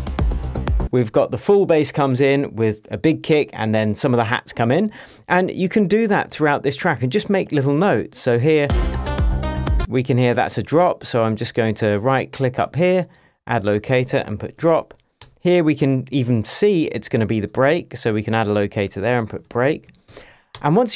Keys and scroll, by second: 0.8 space, 8.6 space.